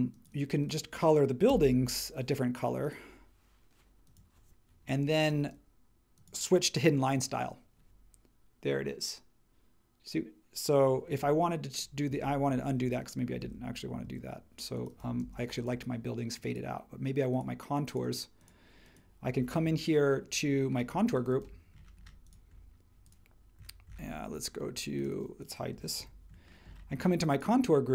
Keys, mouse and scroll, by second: 1.5 b, 5.1 space, 12.1 super+z, 13.4 super+z, 15.2 space, 26.0 super+e.